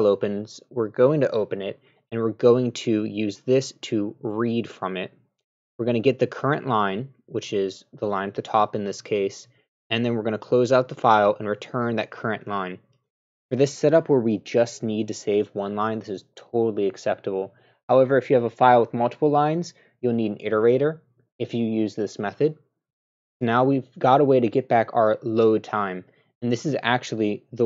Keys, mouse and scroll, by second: 2.6 click, 6.0 click.